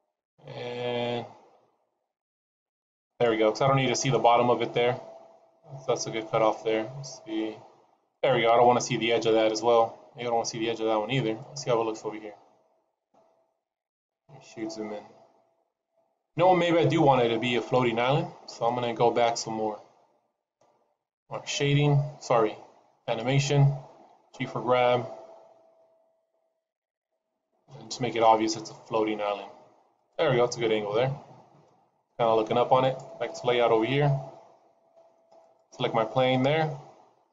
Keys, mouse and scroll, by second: 13.3 click, 34.3 click, 35.4 click.